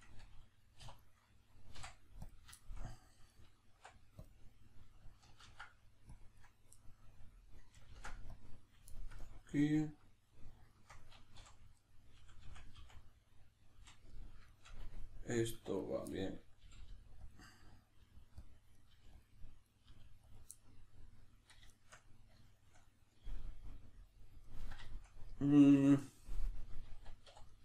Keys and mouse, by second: 0.8 3, 1.0 right click, 1.7 x, 2.6-3.3 shift+middle drag, 3.3 right click, 3.7 x, 6.5 right click, 6.8-8.6 middle drag, 7.9 ctrl+r, 8.6 right click, 8.9-9.5 shift+middle drag, 10.3 right click, 10.7 shift+right click, 11.4 f, 11.8 right click, 12.2 f, 13.0-15.8 middle drag, 13.7 f, 15.5 1, 15.8 right click, 16.1-17.3 middle drag, 16.7 g, 17.3 click, 17.5-18.5 middle drag, 18.0 g, 18.5 click, 18.7 right click, 18.9 g, 19.3 click, 19.7 right click, 19.9 g, 20.4 click, 20.5-27.5 middle drag, 27.3 2, 27.5 right click.